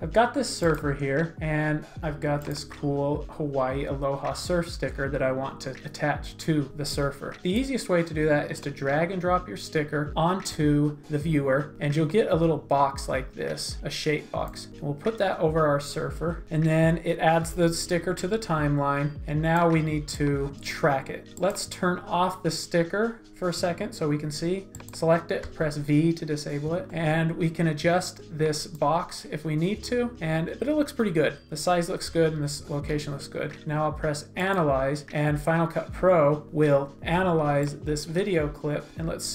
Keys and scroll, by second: 16.4 shift+z, 25.4 v.